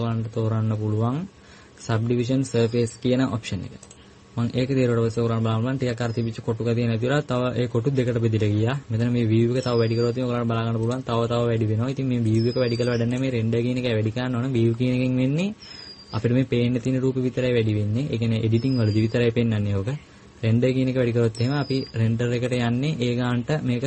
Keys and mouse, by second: 0.1-4.7 drag.